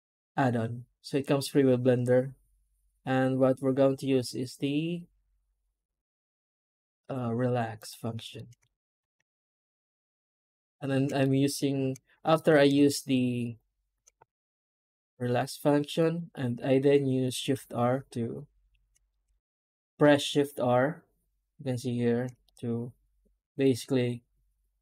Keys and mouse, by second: 8.2 middle click, 10.0 shift+r, 10.7 shift+r, 11.1 middle click, 11.4 middle click, 12.2 alt+a, 12.9 alt+shift+click, 16.5 middle click, 16.9 middle click, 17.0 middle click, 18.7 shift+r, 19.0 middle click, 19.1 middle click, 20.1-22.1 shift+r, 22.3 middle click, 23.5 middle click.